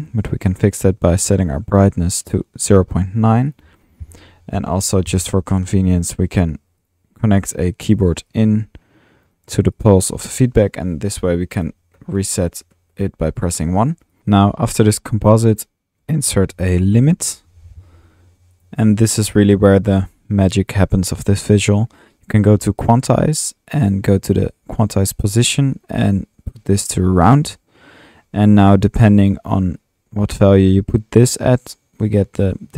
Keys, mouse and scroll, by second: 2.9 typing, 3.5 click, 4.4-5.1 typing, 5.9 click, 6.9 click, 7.3 click, 8.3-9.5 drag, 10.3 click, 10.7-11.1 typing, 12.5-13.8 typing, 16.1 Tab, 16.1 click, 16.8-18.5 typing, 18.6-19.3 drag, 19.6 drag, 19.8 middle click, 22.8-23.1 drag, 25.4-25.8 drag, 27.2-27.5 drag, 28.2-29.2 middle drag, 29.8-32.7 drag.